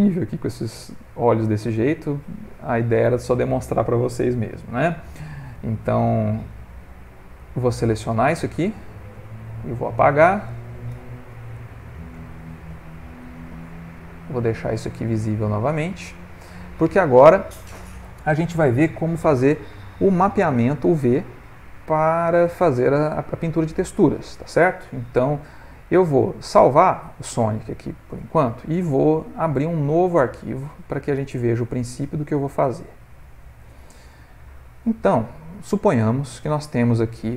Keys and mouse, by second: 0.1 middle click, 0.3 middle click, 0.4 middle click, 0.5 middle click, 0.7 ctrl+middle click, 1.2 middle click, 1.3 middle click, 1.4 middle click, 3.6 middle click, 5.1 ctrl+z, 6.9 shift+click, 7.4 shift+click, 8.0 shift+click, 8.7 shift+click, 9.2 shift+click, 9.8 shift+click, 10.9 x, 12.3 click, 12.7 x, 14.2 click, 14.8 middle click, 15.9 ctrl+middle click, 16.0 ctrl+middle click, 16.3 middle click, 21.9 middle click, 23.6 ctrl+middle click, 23.8 ctrl+middle click, 24.0 middle click, 25.1 middle click, 25.7 middle click, 25.7 ctrl+middle click, 26.6 ctrl+s, 27.3 middle click, 29.8 click.